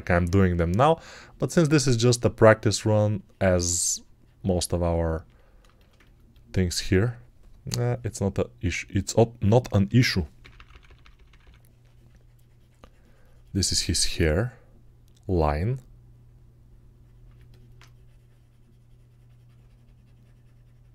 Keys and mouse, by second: 6.8-17.3 right drag, 9.7-11.3 typing.